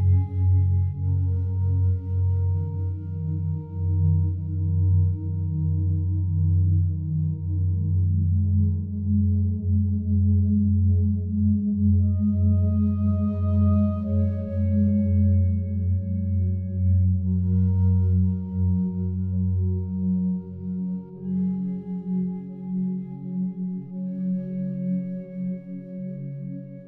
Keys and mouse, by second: 0.1-1.1 alt+drag, 1.4 alt+click, 2.2 alt+click, 3.1-5.5 alt+drag, 6.1 ctrl+alt+click, 7.1 click, 8.2-9.3 drag, 9.6 alt+click, 10.8 click, 11.6-12.7 drag, 13.1 alt+click, 13.9 alt+click, 14.8 alt+click, 15.6 ctrl+alt+click, 16.2 alt+click, 17.0 alt+click, 17.4 alt+click, 17.9 ctrl+alt+click, 20.7 f, 21.3 click, 22.3-24.9 drag, 25.9 click, 26.6 click.